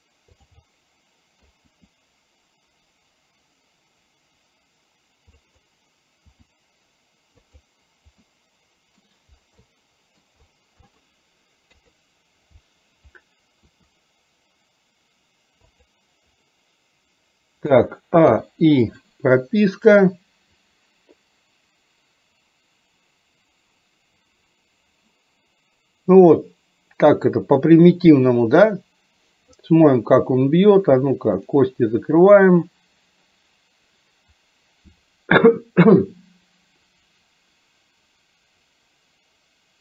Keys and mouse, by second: 0.7 middle click, 1.8 r, 6.3 r, 8.4 middle click, 9.6 middle click, 10.9 middle click, 11.7 KP_3, 13.9 r, 17.7 a, 18.4 i, 20.1-29.6 drag, 31.3 click, 32.9-39.8 drag.